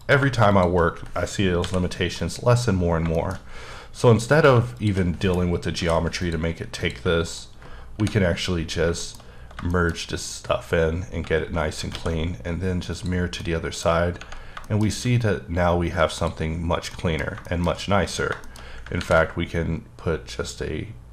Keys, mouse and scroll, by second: 0.0 click, 0.5 shift+click, 1.6 m, 2.2 click, 2.7-3.1 scroll down 3, 3.1 shift+middle click, 3.6 scroll up 5, 4.4 click, 5.8 m, 6.2 click, 6.8 click, 7.3 shift+click, 7.9 shift+r, 8.4-9.0 scroll down 4, 9.0 shift+middle click, 9.9-10.6 scroll down 1, 10.6-11.2 scroll down 3, 12.0 alt+x, 12.9 click, 13.4 middle click, 14.1-14.5 scroll up 4, 14.6 shift+middle click, 14.9-15.6 scroll up 1, 15.6-16.2 scroll down 1, 16.2 click, 16.5-16.9 scroll down 2, 16.9 middle click, 18.1-18.8 scroll down 3, 18.4 shift+middle click, 18.8 scroll up 3, 19.0 ctrl+r, 19.4-20.4 scroll up 2, 20.4-21.1 scroll down 1.